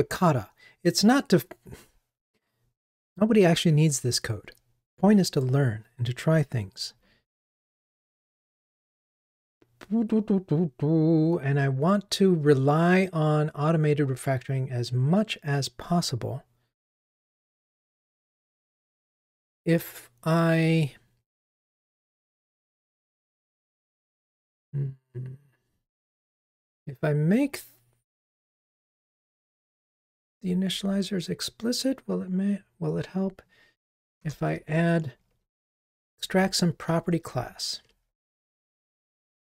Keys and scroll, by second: 37.6 super+z.